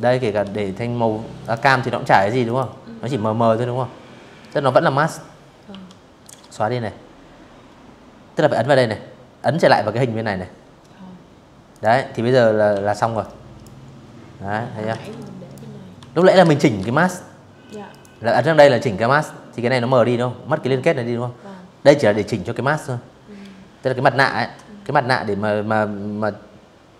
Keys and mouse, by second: 0.1 click, 3.4 Delete, 7.0 click, 9.4 click, 10.4 m, 10.9 click, 12.6 ctrl+z, 12.8 click, 13.6 v, 14.1 ctrl+z, 14.4 v, 14.6 click, 15.6 click, 25.7 z, 25.9 click, 26.1 v.